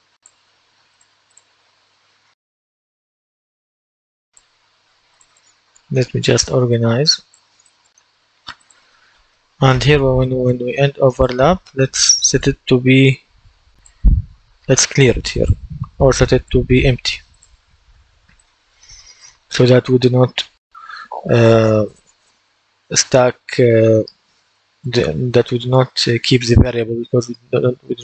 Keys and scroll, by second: 12.8 ctrl+d.